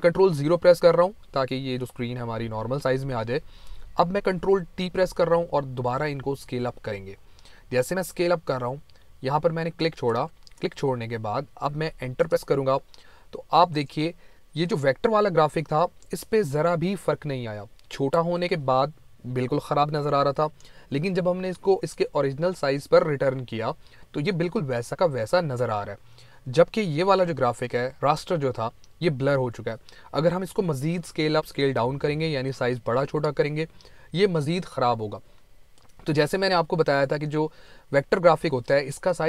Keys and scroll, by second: 4.6 ctrl+1, 12.0 Return.